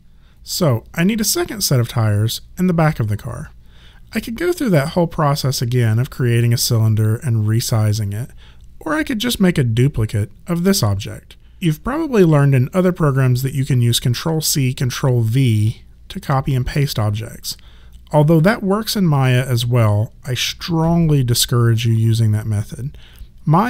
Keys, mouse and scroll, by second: 5.3 click.